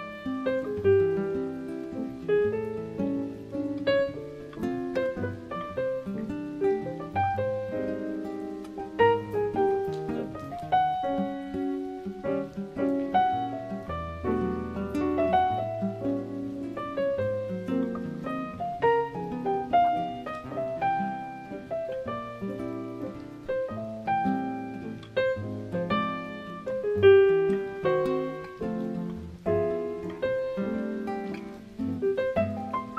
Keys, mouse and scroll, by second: 1.8 click, 5.0 click, 6.5 Tab, 6.8 middle click, 7.6 shift+middle click, 8.6 right click, 10.1 g, 15.6 g, 17.9 middle click, 19.4 click, 19.7 scroll up 5, 20.2 middle click, 27.4-27.8 scroll down 7, 29.3 g, 32.3-32.9 scroll down 12.